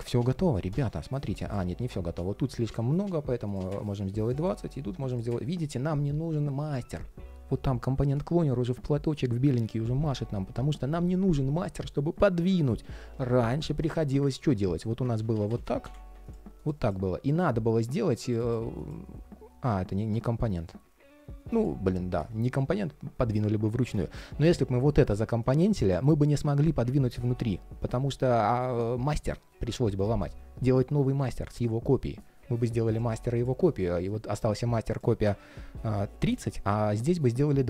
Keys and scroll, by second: 14.9 super+z, 26.8 super+z.